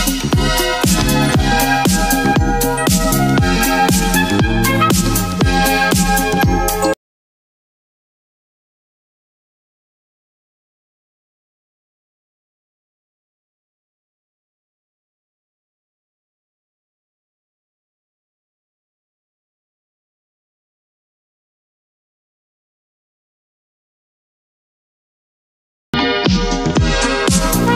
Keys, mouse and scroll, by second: 0.0 click, 1.8 shift+click, 2.7 ctrl+g, 3.4 click, 3.4 click, 4.0-6.8 typing, 7.8 Return, 8.5 click, 9.9 ctrl+g, 10.7 click, 11.3-13.5 typing, 15.0 click, 16.6 click.